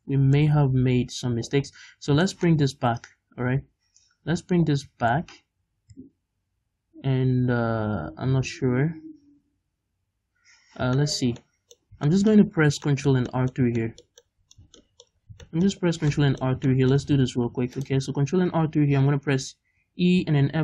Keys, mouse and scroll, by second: 0.4 ctrl+z, 0.4-20.6 middle drag, 1.7-2.3 scroll down 2, 2.8-6.8 scroll down 2, 8.7-10.6 scroll down 2, 10.6-11.0 scroll up 2, 12.5-12.9 scroll up 2, 15.3 scroll down 2, 15.8-16.2 scroll up 2, 17.4 ctrl+r.